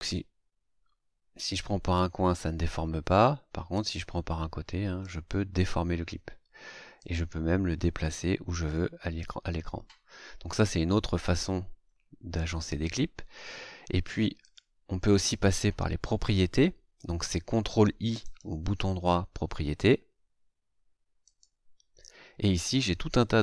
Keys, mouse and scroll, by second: 3.7-5.2 drag, 7.0-10.7 drag, 14.4 click, 18.2 right click, 21.2 click.